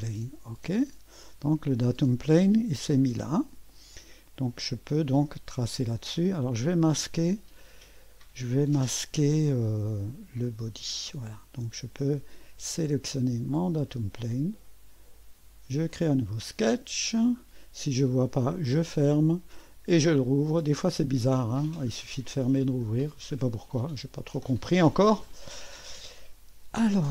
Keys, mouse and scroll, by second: 0.6 click, 4.0 click, 9.9 click, 10.5 space, 13.6 click, 15.9 click, 17.1 scroll down 1, 18.6 click, 20.1 click, 20.9 click, 21.9-22.3 scroll up 1, 22.3 right click, 23.4 scroll up 1, 23.6 right click.